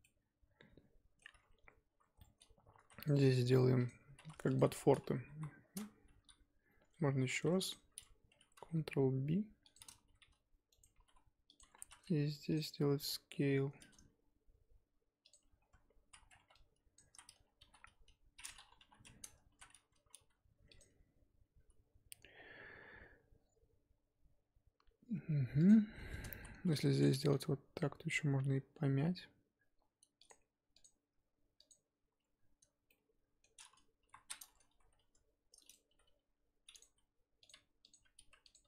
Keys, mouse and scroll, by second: 0.0-1.4 middle drag, 1.4 scroll up 1, 2.2 middle click, 2.7 ctrl+r, 4.1 3, 4.6 alt+click, 4.7-5.3 scroll down 5, 5.3 KP_1, 5.5 scroll up 2, 7.3 2, 7.7 alt+click, 8.5 ctrl+b, 10.1 g, 10.9 g, 11.8 3, 12.5 alt+click, 13.0 s, 15.4-16.1 scroll up 1, 16.1 z, 16.3 1, 16.9 click, 17.0 z, 17.6 g, 18.5 scroll down 3, 18.8 KP_3, 19.1-19.5 scroll up 4, 19.5 z, 20.2 r, 26.4 z, 26.7 ctrl+r, 27.3 s, 30.8 alt+click, 31.7 alt+click, 32.9-34.0 middle drag, 34.0 KP_1, 34.5 scroll up 1, 34.9 s, 35.9 g, 36.8 s, 37.9 alt+click, 38.5 alt+click.